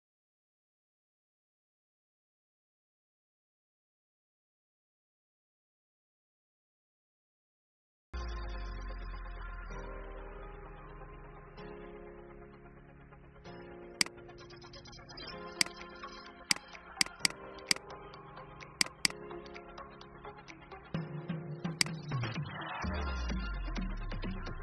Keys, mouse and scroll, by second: 12.1 ctrl+x, 12.7 ctrl+b, 13.8 click, 17.9 Delete, 18.6 click, 19.7 alt+scroll down 1, 21.6 click, 22.8 alt+scroll up 1.